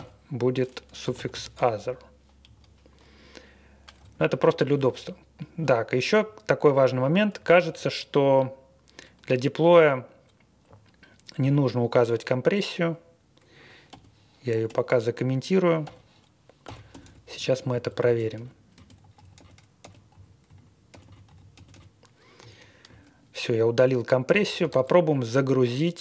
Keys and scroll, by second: 0.0-2.0 typing, 3.9 Down, 4.1 Down, 4.2 Down, 4.4 Down, 4.7 Up, 7.3 Down, 7.6 Up, 10.6 Left, 10.8-11.3 Left, 13.8-14.6 typing, 15.1 Escape, 16.3-21.7 typing, 22.4 Escape, 24.2 shift+;.